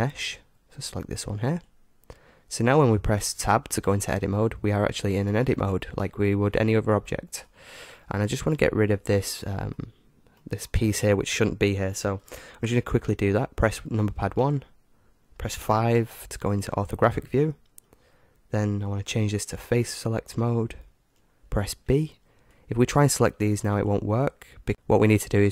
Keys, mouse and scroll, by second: 3.9 Tab, 4.7-12.2 middle drag, 14.4 KP_1, 16.0 KP_5, 17.5-19.9 middle drag, 19.9-21.6 drag, 21.9 b.